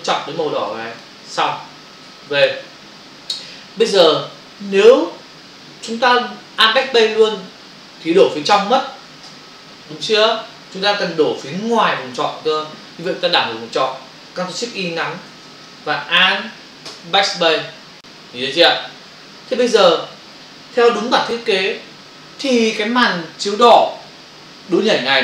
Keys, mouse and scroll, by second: 1.0 click, 2.1 v, 9.3 alt+BackSpace, 11.4 ctrl+alt+z, 16.9 alt+BackSpace.